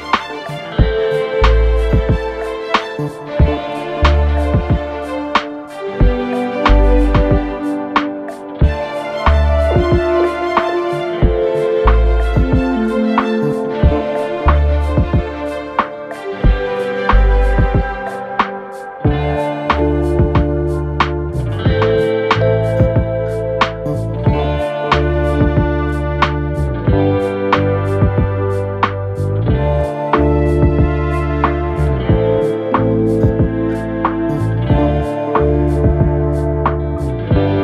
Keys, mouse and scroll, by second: 0.0-1.5 typing, 13.9 typing, 29.7 typing.